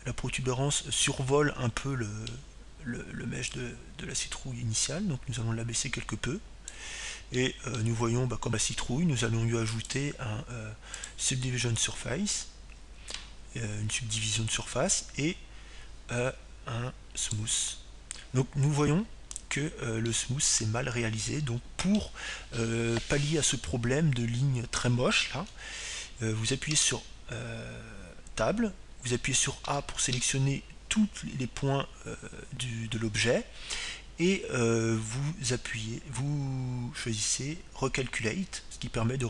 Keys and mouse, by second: 4.0-5.6 middle drag, 6.2-8.1 drag, 10.3-12.1 middle drag, 12.6-14.7 drag, 20.3-21.9 drag, 23.3-25.1 middle drag, 29.8 Tab, 32.6 a, 33.3 a.